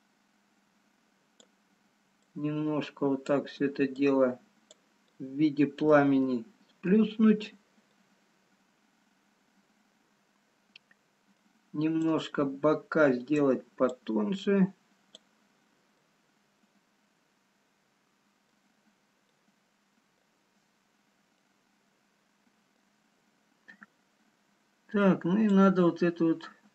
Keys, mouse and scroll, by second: 2.1 click, 5.2 click, 5.2 middle click, 6.3 middle click, 6.3 scroll up 1, 8.9 middle click, 8.9-9.2 scroll down 2, 12.1 click, 14.1 click, 16.1 middle click, 16.1 scroll down 1, 18.8 scroll up 2, 19.6 middle click, 20.8-21.3 scroll up 1, 21.3 middle click, 26.5 click, 26.5-26.7 scroll down 3.